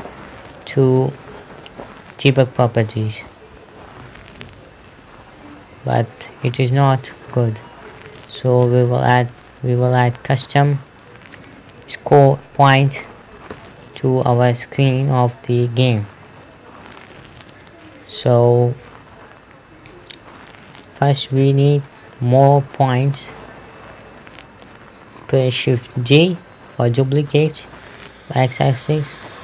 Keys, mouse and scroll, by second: 1.6 space, 1.8 d, 3.7-6.0 typing, 7.0 Escape, 9.4 click, 16.7 middle click, 20.9 right click, 21.4-21.7 scroll up 1, 22.3 middle click, 26.6-27.6 typing, 29.0 click.